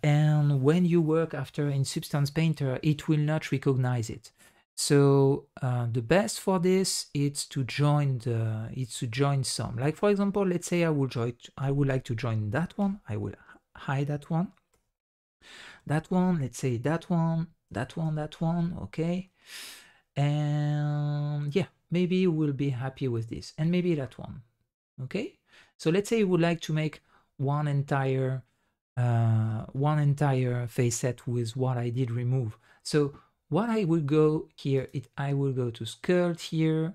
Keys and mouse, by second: 8.1 middle click, 8.9 middle drag, 9.5 middle click, 10.2 middle drag, 12.7 h, 13.1 middle drag, 14.7 h, 15.0 middle click, 15.7 h, 16.3 middle click, 17.6 h, 18.0 h, 18.6-18.9 middle drag, 19.2 middle click, 19.6-21.6 middle drag, 23.2 h, 23.9-25.7 middle drag, 26.4-29.4 middle drag, 34.8-36.9 drag.